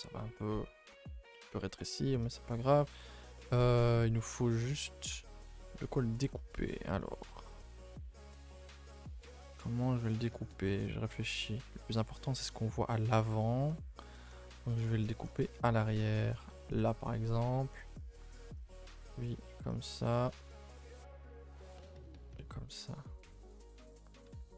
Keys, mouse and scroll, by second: 1.7 scroll down 2, 1.9 scroll up 1, 2.0-10.9 middle drag, 10.9 scroll down 1, 11.1-15.6 middle drag, 15.6-16.0 scroll up 1, 16.0 a, 16.1 a, 16.7 alt+click, 17.0 middle click, 17.7-18.3 scroll up 1, 18.3 shift+click, 18.6 shift+click, 19.3 shift+click, 19.8 shift+click, 20.4 middle click, 21.1 shift+click, 21.4 shift+click, 22.2 shift+click, 22.4-24.0 middle drag, 24.0 right click, 24.2 a, 24.4 a, 24.5 scroll down 2.